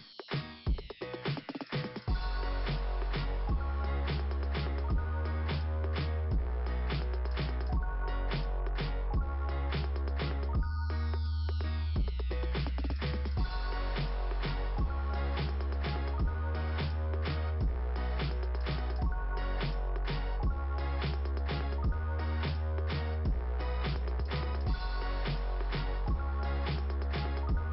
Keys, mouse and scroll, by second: 1.5 click, 3.5 click, 3.6 click, 6.6 scroll up 2, 11.4 click, 13.4 scroll down 2, 14.6 click, 15.3 click, 17.5 click, 19.5 click, 20.7 click, 21.2 scroll up 2.